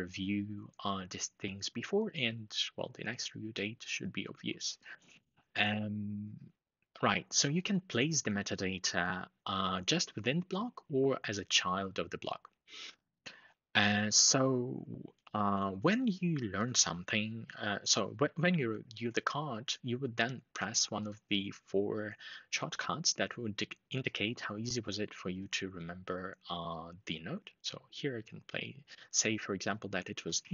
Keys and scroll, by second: 30.0 ctrl+shift+4.